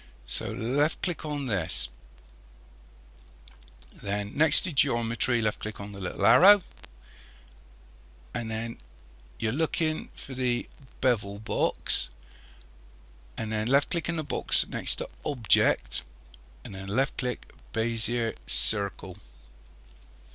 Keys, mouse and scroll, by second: 1.6 click, 6.2 click, 8.0-8.6 scroll down 1, 10.5 click, 15.2 click.